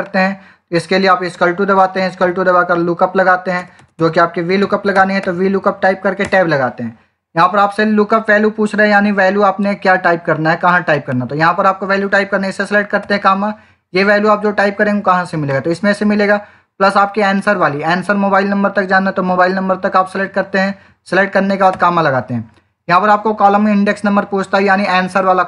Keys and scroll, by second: 1.2-5.6 typing, 12.9 ,, 21.6 ,.